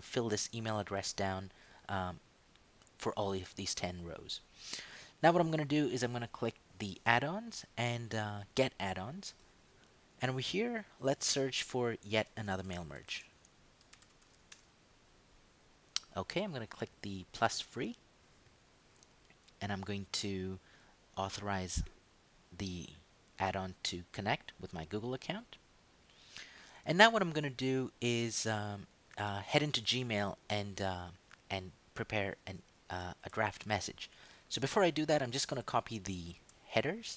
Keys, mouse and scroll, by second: 0.1 ctrl+d, 0.8 Right, 5.1 click, 6.8 click, 9.0 click, 12.2 shift+click, 12.4-14.7 typing, 17.4 click, 20.0-20.7 scroll down 2, 21.9 click, 28.3 click, 32.0 click, 33.5 ctrl+shift+Right, 36.3 ctrl+c.